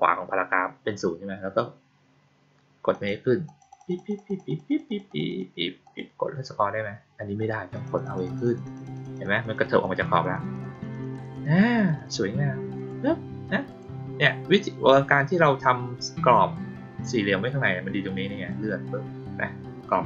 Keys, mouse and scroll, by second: 2.8 click, 3.4 click, 3.6 click, 3.8 click, 4.0 click, 4.2 click, 4.4 click, 4.6 click, 4.8 click, 5.0 click, 5.2 click, 5.8 click, 6.2 middle click, 6.7 middle click, 7.7 click, 7.9 click, 8.1 click, 8.3 click, 8.5 click, 8.7 click, 8.9 click, 9.1 click, 9.3 click, 9.5 click, 9.7 click, 9.9 click, 10.0 click, 10.3 click, 10.4 click, 10.6 click, 10.8 click, 11.0 click, 11.2 click, 11.5 click, 11.7 click, 11.9 click, 12.7 click, 13.6 click, 18.4-20.0 drag.